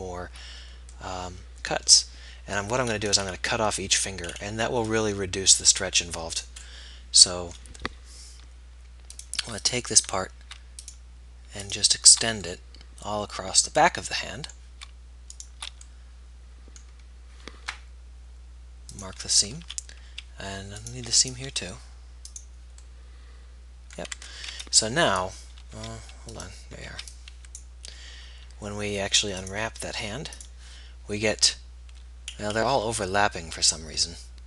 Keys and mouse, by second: 3.4-6.9 middle drag, 7.1 middle click, 9.4-13.5 middle drag, 14.5-15.5 middle drag, 15.5 right click, 16.0-17.0 middle drag, 19.9 a, 23.1 middle click, 24.8 a, 24.8 b, 26.3 z, 27.1 b.